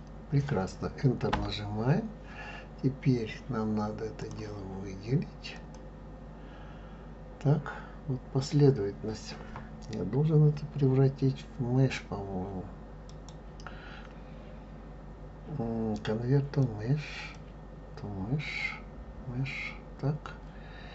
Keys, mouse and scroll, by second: 4.2-5.7 drag, 13.1-17.3 right drag.